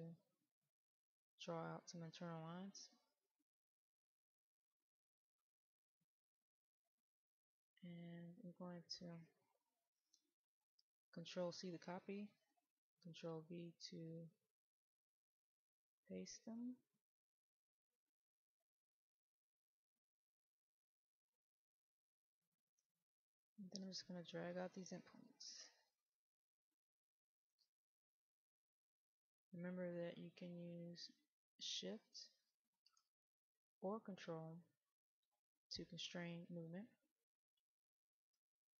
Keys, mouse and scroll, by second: 0.1-8.6 drag, 14.5 click, 17.2 click, 19.5 click, 20.3 middle click, 20.9-21.4 scroll up 1, 21.4 middle click, 23.8-26.9 drag, 28.1-32.4 drag, 33.6-37.8 drag.